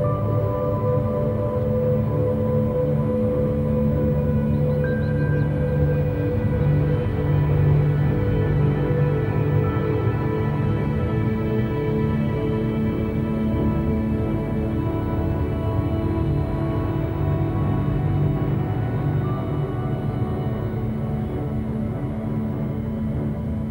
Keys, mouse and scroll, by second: 1.6 KP_Divide, 2.2-2.7 scroll up 1, 2.7 shift+middle click, 3.0-3.8 scroll up 1, 3.8 click, 4.2-6.6 shift+middle drag, 6.6 ctrl+click, 7.8 a, 8.0 a, 8.2 click, 11.3 ctrl+click, 12.1 q, 13.4 F3, 17.7 KP_Divide, 18.3 a, 18.5 a, 18.6-18.9 scroll down 2, 18.9-19.8 middle drag, 19.8-20.2 scroll up 1, 20.2 click, 20.9 click, 21.2 Tab, 21.5-22.5 middle drag, 22.5 3, 22.7 click, 23.1-23.7 scroll down 2.